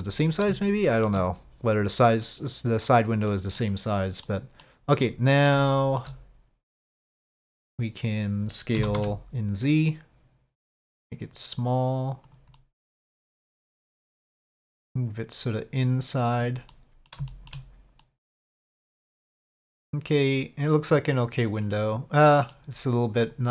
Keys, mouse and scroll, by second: 0.1 click, 0.1-0.6 middle drag, 0.6-1.1 shift+drag, 3.3-3.6 middle drag, 4.2-4.6 middle drag, 5.6-6.0 shift+middle drag, 8.8 s, 12.6-13.3 middle drag, 13.8-16.2 drag, 16.7-17.1 middle drag, 17.3 shift+drag, 18.0-18.8 middle drag, 19.1-22.5 middle drag, 23.2 click.